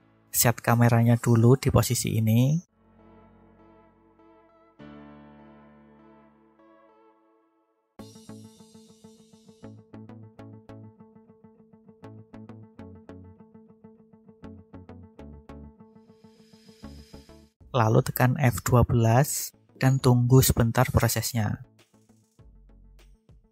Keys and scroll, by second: 7.2 ctrl+alt+0, 18.1 F12.